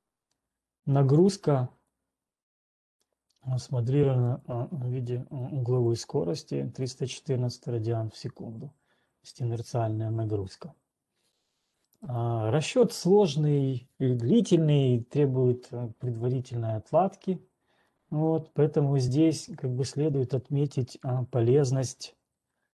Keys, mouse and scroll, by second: 0.3 scroll, 1.3-1.8 scroll, 3.3-3.8 scroll, 4.8 click, 6.1 ctrl+1, 6.3 click, 7.3 click, 13.1 right click, 22.3 right click.